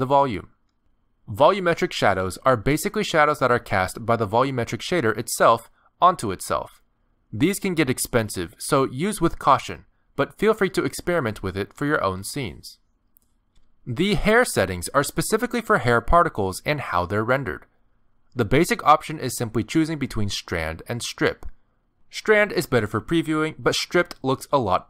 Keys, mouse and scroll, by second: 3.2 click, 3.9 middle click, 7.8 click, 8.3 click, 8.7 middle click, 11.5 scroll down 1, 11.6 middle click, 13.8 click.